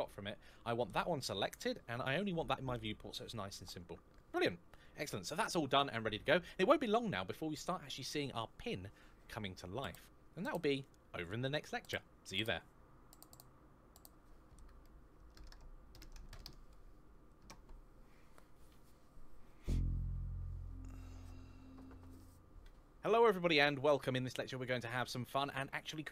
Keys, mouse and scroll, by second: 2.0-2.4 scroll down 1, 2.4-4.0 scroll up 1, 24.4 middle click.